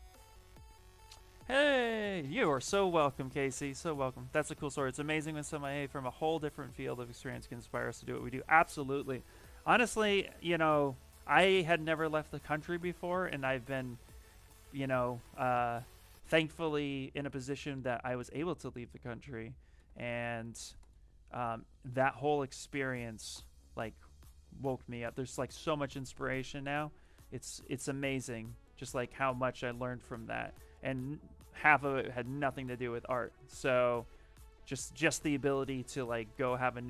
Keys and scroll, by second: 16.4 w, 17.4 x, 26.4 q, 27.2 w, 28.6 q, 29.4 shift+f, 30.0 w, 35.6-36.8 typing.